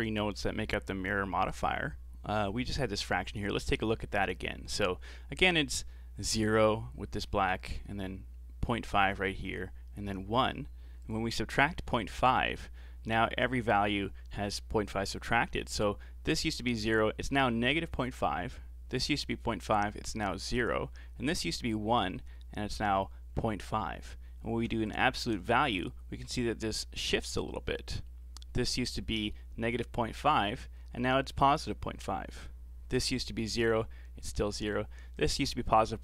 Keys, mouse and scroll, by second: 11.0 ctrl+shift+click, 24.9 ctrl+shift+click.